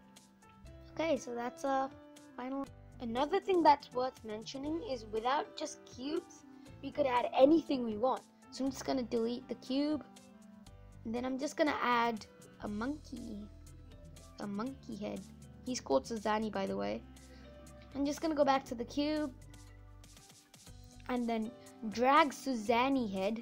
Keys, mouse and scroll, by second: 0.9-2.6 scroll down 1, 2.6-7.5 middle drag, 7.5 Delete, 12.3 shift+a, 13.1-16.7 middle drag, 16.7-17.2 scroll up 2, 19.1 click, 21.5 click.